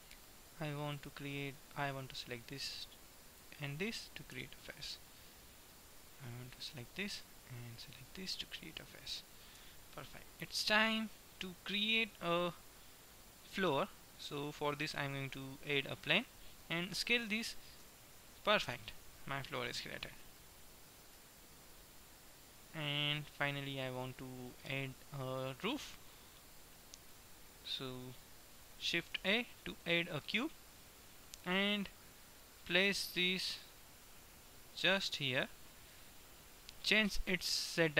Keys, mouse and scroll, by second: 1.5-3.1 middle drag, 3.3-5.1 right drag, 4.5 f, 5.1 middle click, 6.5-8.3 middle drag, 9.6 f, 13.3-15.5 middle drag, 15.1 shift+a, 17.1 s, 24.6-25.6 middle drag, 25.8-27.3 middle drag, 29.3 shift+a, 30.6 middle click, 33.6-35.3 drag, 36.1-37.6 drag, 37.6-37.9 middle drag.